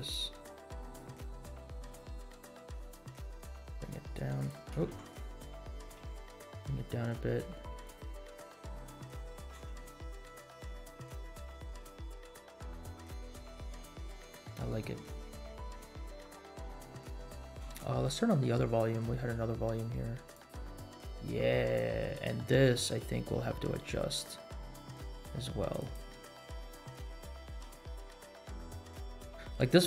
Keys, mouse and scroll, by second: 1.8 middle click, 2.3-3.2 drag, 3.5 h, 3.8 z, 5.1 ctrl+z, 5.9 g, 8.3 middle click, 9.0-9.7 scroll up 3, 9.7 space, 14.2-14.7 scroll down 3, 16.2 scroll down 2, 17.7 space, 18.9-19.9 scroll up 7, 20.4 click, 22.2 click, 24.2 click, 27.7 space, 29.5-29.8 scroll up 3.